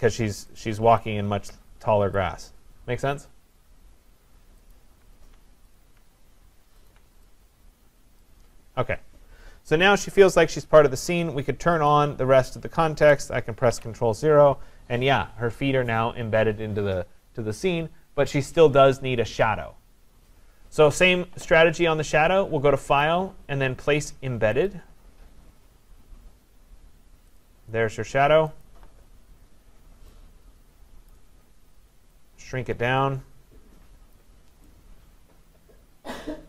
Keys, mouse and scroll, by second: 0.6 alt+click, 2.2 click, 4.8 alt+click, 5.8 alt+click, 6.9 alt+click, 8.3 click, 11.9 click, 13.0 click, 13.7 ctrl+0, 23.0 click, 24.7 click, 27.4 click, 28.9 click, 31.1 click, 34.1 click.